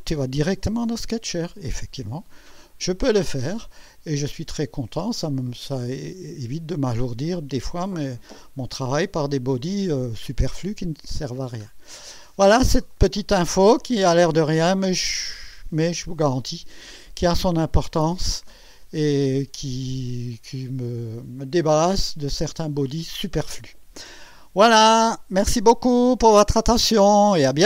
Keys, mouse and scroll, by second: 2.4-3.5 right drag, 3.6-5.0 drag, 11.3 scroll up 1, 11.7 scroll down 1, 12.1 middle click, 12.9-16.0 drag, 17.2-19.0 drag, 19.4 right click, 20.3-22.8 drag.